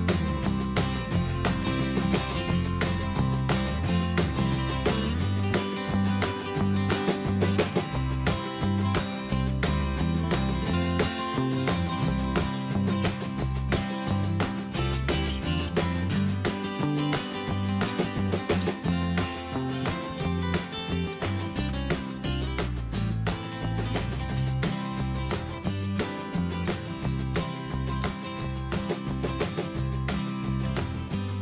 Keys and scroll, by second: 4.5 ctrl+g, 11.8 ctrl+g, 19.6 Down, 20.4 ctrl+z, 22.1 Down.